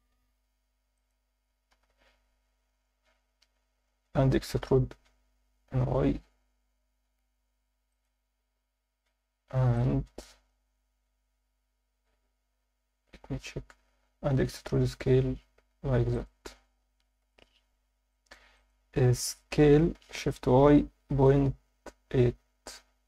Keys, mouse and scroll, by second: 0.1 s, 1.0 click, 1.7 KP_7, 3.1 Tab, 4.3 e, 4.6 y, 7.9 click, 9.8 alt+middle click, 10.8 z, 16.1 click, 17.2 KP_1, 17.7 a, 18.1 alt+shift+middle click, 18.6 ctrl+alt+middle click, 19.9 s, 20.5 shift+y, 21.1 ., 22.1 8.